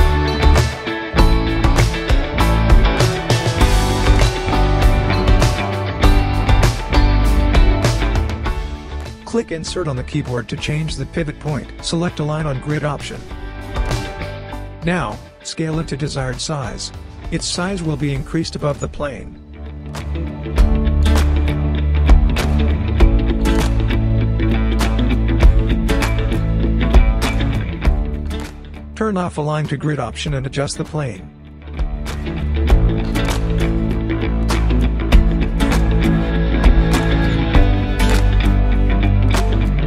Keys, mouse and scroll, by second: 5.5-11.0 drag, 7.1-8.4 typing, 10.5 typing, 12.8-13.3 scroll down 1, 12.8 typing, 13.3-13.8 scroll up 1, 14.3 r, 14.8-17.9 drag, 21.5-21.9 scroll down 1, 22.0 click, 22.2-22.8 scroll down 1, 22.8 space, 23.9 scroll down 1, 25.1-25.8 scroll up 1, 25.8 click, 26.4 space, 27.3-27.7 scroll down 1, 28.6 scroll down 1, 29.7 w, 30.6-32.1 drag, 33.5-35.1 typing, 35.9-36.5 scroll up 1, 36.5 click, 36.7-37.3 scroll up 1, 37.3-37.7 scroll down 1, 37.7 click, 39.2 space.